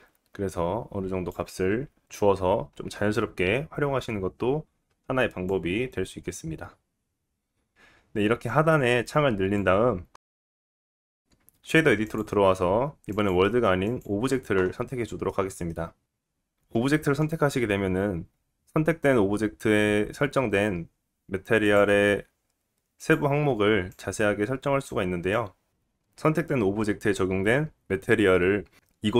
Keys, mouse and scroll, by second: 8.6-16.0 drag, 15.0 scroll down 2, 15.2 middle click, 16.0-21.6 middle drag, 21.6 click, 21.7-23.9 middle drag, 23.9-29.1 drag.